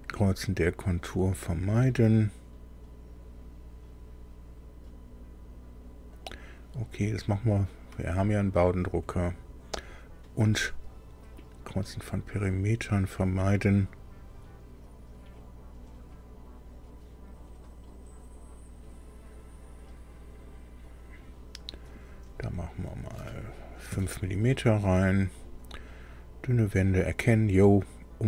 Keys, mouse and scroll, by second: 8.1 click, 21.9 click, 23.8 KP_5, 24.9 click.